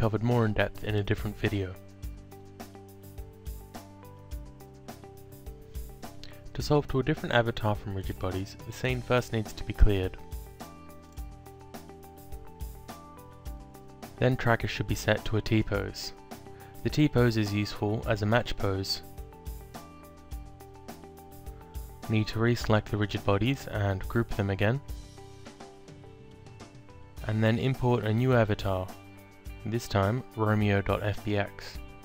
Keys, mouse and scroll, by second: 1.2 alt+click, 4.4 click, 5.6 alt+click, 9.5 click, 12.2 click, 13.5 click, 14.8 click, 18.2 click, 19.3 alt+click, 23.1 click, 24.6-25.3 typing, 25.5 Return, 26.4 click, 28.1 click, 29.3 click, 30.8 click.